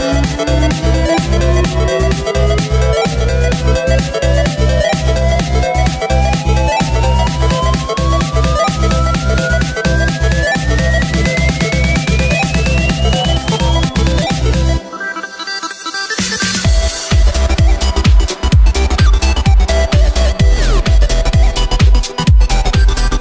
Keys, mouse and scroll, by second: 0.0-0.4 scroll down 3, 0.4 scroll up 1, 0.5-1.9 middle drag, 1.9 scroll down 1, 2.2 scroll up 3, 2.5-3.0 middle drag, 3.0-3.6 scroll down 5, 3.6 KP_0, 4.2 scroll up 1, 4.3 scroll down 1, 4.4-5.1 scroll up 4, 5.1-5.7 middle drag, 5.7 scroll down 1, 5.9-6.8 scroll up 4, 6.8-8.1 middle drag, 8.1 scroll down 1, 8.2-8.6 scroll up 1, 8.6-10.3 middle drag, 10.3 shift+a, 11.5 shift+a, 14.7 middle click, 15.1 s, 17.8 x, 18.2 shift+a, 19.7 s, 21.0 g, 22.2 g.